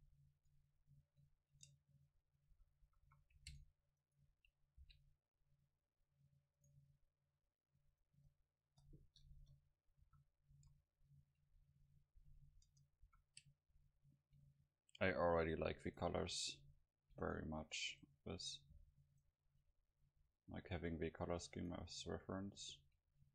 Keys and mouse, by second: 1.5 Tab, 2.5 a, 2.9 a, 3.1 a, 4.8 c, 8.2 Tab, 8.7 Tab, 9.3 KP_0, 10.0 a, 10.5 a, 11.0-12.5 middle drag, 12.7 Tab, 13.1 a, 14.2 middle click, 15.9-20.1 right drag, 20.2 middle click, 20.7 middle click, 21.8-22.9 right drag.